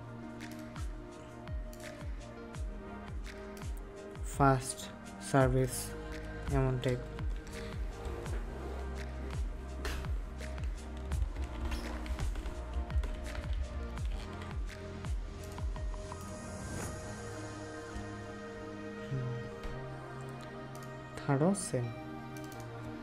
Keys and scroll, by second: 8.0 ctrl+s, 14.0 ctrl+w.